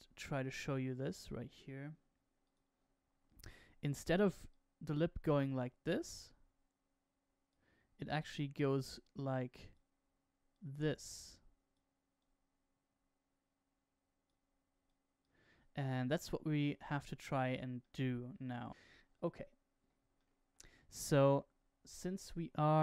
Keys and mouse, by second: 2.4 click, 4.5-7.4 drag, 8.6-9.7 drag, 10.4-11.7 drag, 12.1-14.2 drag, 14.8 click, 17.8 middle click, 20.1 shift+middle click, 21.2 KP_0.